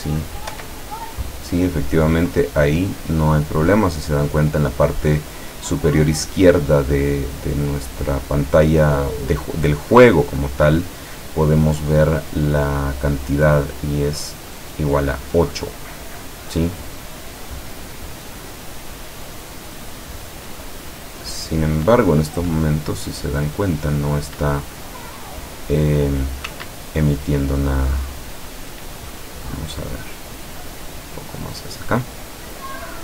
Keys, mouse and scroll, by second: 0.6 p, 26.6 Escape, 27.5-29.0 middle drag, 29.0 scroll up 1, 30.0-31.1 drag.